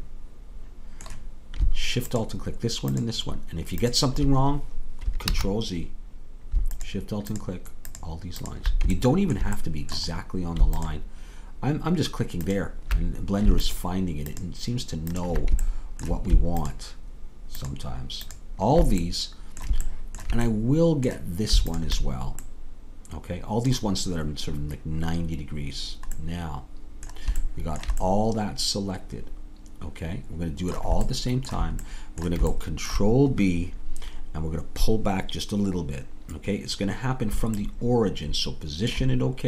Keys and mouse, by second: 5.4 ctrl+z, 10.2-14.7 middle drag, 14.7 click, 15.9-19.2 drag, 15.9-20.0 right drag, 22.5-25.4 drag, 22.5-25.4 middle drag, 28.1 middle click, 28.3-30.4 middle drag, 31.1-35.7 middle drag, 38.5-39.4 middle drag.